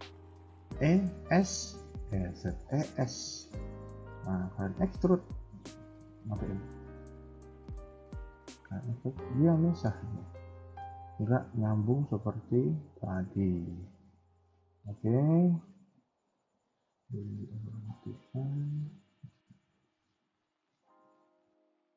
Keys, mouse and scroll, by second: 0.6 e, 6.2 click, 6.6 middle click, 8.5 middle click, 9.5 middle click, 10.9 KP_1, 11.4 middle click, 12.2-12.5 scroll up 1, 12.8 scroll down 1, 13.0 middle click, 13.5 KP_1, 13.9 middle click, 15.5-16.5 scroll down 8, 17.0 click, 18.8 click.